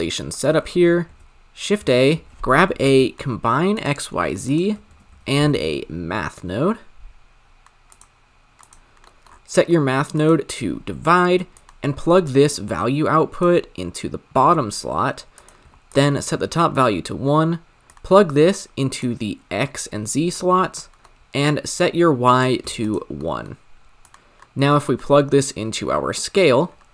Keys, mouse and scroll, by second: 3.8 shift+a, 4.9 shift+a, 10.6-13.4 drag, 15.9-19.0 drag, 19.5-20.4 drag, 22.8-26.2 drag.